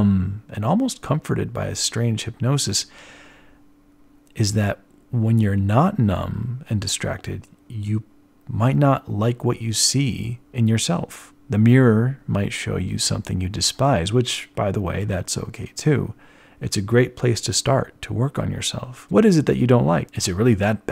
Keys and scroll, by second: 4.3 z, 4.5 z, 10.9 z, 16.6 ctrl+alt+1, 16.8 b.